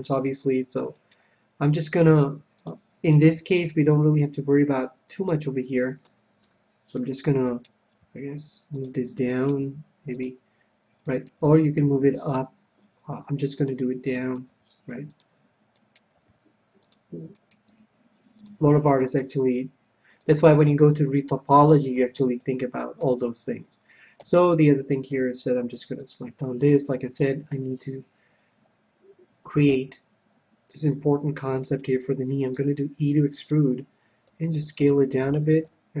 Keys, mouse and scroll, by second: 1.3-3.0 right drag, 2.4 g, 3.0-5.8 drag, 3.5-5.3 right drag, 3.7 g, 5.6-7.1 middle drag, 6.8 KP_1, 7.8-13.3 right drag, 8.4 g, 9.1-12.2 drag, 9.8 g, 10.0 g, 11.7 g, 14.0-16.4 drag, 14.7-16.4 right drag, 14.8 g, 16.5 g, 17.0 click, 18.1 g, 19.9 g, 20.4 click, 20.8 right click, 21.1-22.2 drag, 21.5-24.2 middle drag, 24.5 a, 25.4 c, 32.1-35.3 right drag, 33.0 e, 34.6 s, 35.9-36.0 drag.